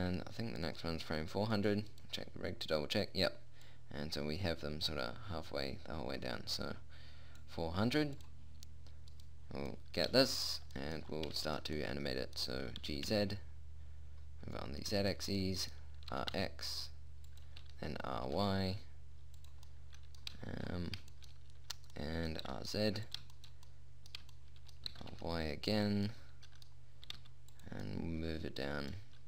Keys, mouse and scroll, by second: 2.0-4.8 right drag, 4.8-5.9 drag, 5.9-8.6 middle drag, 8.6-9.6 drag, 10.2 middle click, 11.0 middle click, 13.2 g, 15.8 middle click, 16.6 r, 18.0 r, 20.2-21.6 middle drag, 22.9 r, 25.4 r, 27.5 g.